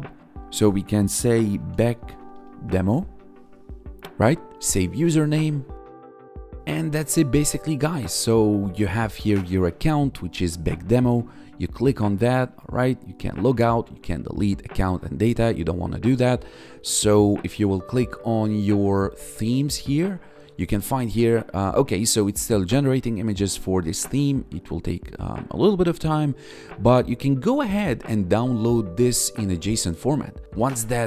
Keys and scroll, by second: 1.3-2.4 typing, 10.3 1, 17.7 1.